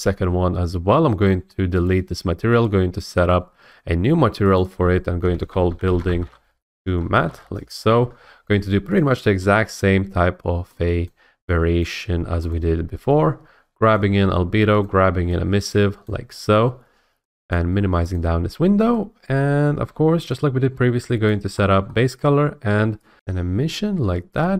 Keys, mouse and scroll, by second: 2.7 click, 4.6 click, 5.3-7.7 typing, 9.0 click, 9.5 click, 11.1 click, 11.8 click, 12.5 click, 14.0 click, 14.8 click, 16.1 click, 17.5 click, 18.2 click, 19.4 middle click, 20.3 scroll, 21.3 click, 21.9-22.8 scroll.